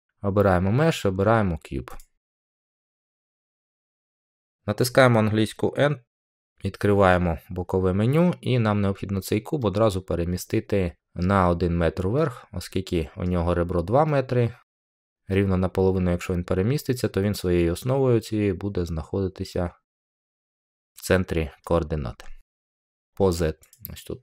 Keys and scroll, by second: 6.1 n.